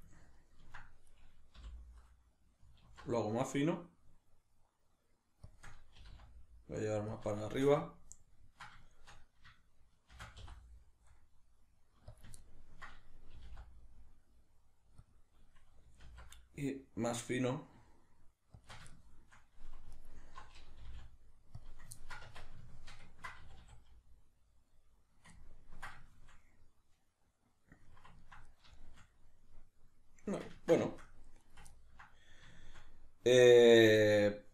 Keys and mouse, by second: 0.1 ctrl+middle click, 1.1 right click, 1.6 l, 5.6 shift+click, 6.0 g, 7.2 click, 7.5-12.2 shift+middle drag, 10.2 shift+d, 12.2 click, 12.4-15.1 ctrl+middle drag, 13.3 g, 15.1 click, 16.1 alt+s, 18.7 shift+click, 18.9-19.9 shift+middle drag, 19.9 alt+right click, 20.8 g, 21.7 click, 22.0-31.4 ctrl+middle drag, 22.3 Tab, 23.4 a, 31.4 right drag, 31.7-34.5 ctrl+middle drag.